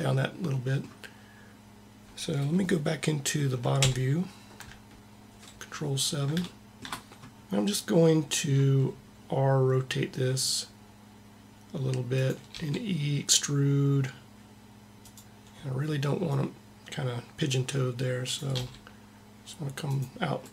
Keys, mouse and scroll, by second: 3.7 ctrl+KP_7, 3.9 ctrl+KP_7, 8.5 r, 12.3 e, 16.3-18.0 drag, 18.3 r.